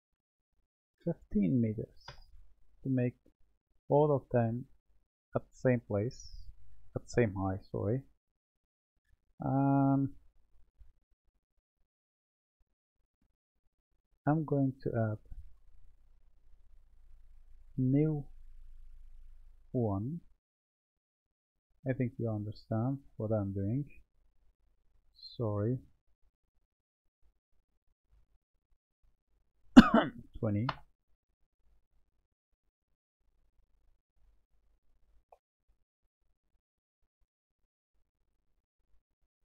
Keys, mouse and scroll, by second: 0.7-3.8 drag, 4.3-5.4 middle drag, 5.4-5.7 scroll down 2, 5.7-10.9 middle drag, 12.8-15.4 middle drag, 15.4 Tab, 16.8 click, 17.5 Tab, 18.6-21.0 drag, 21.0-22.5 middle drag, 22.5-23.7 drag, 25.3 ctrl+z, 26.7 click, 29.1-32.2 drag, 33.2 click, 33.9-36.5 middle drag, 36.5 click, 39.1-39.5 middle drag.